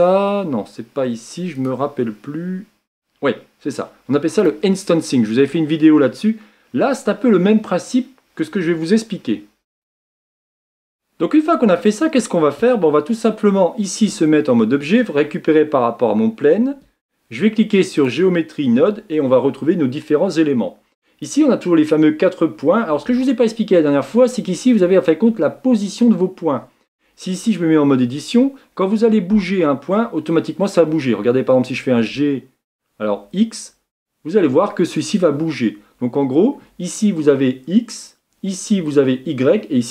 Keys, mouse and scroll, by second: 1.6 click, 2.8-3.7 scroll down 2, 4.4-4.8 drag, 4.8-5.9 scroll down 2, 5.9-6.6 scroll down 1, 6.9 click, 7.7-12.1 middle drag, 14.0 Tab, 18.0 click, 20.4-27.8 drag, 27.8 Tab, 29.8-31.2 middle drag, 31.8 g.